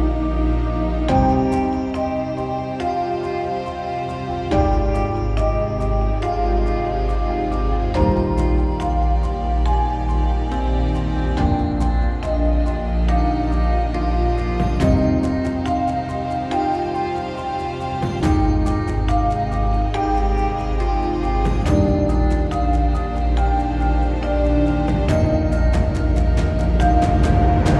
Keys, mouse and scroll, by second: 1.1 middle click, 2.6 ctrl+z, 3.8 ctrl+z, 4.8 middle click, 6.8 middle click, 8.0 middle click, 9.1 middle click, 12.2 middle click, 13.1 middle click.